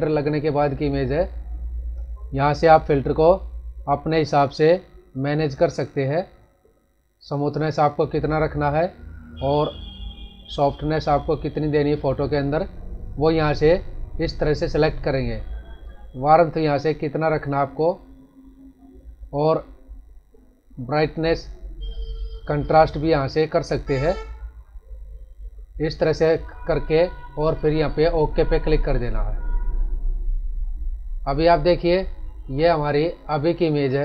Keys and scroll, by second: 32.6 ctrl+=, 33.7 ctrl+-.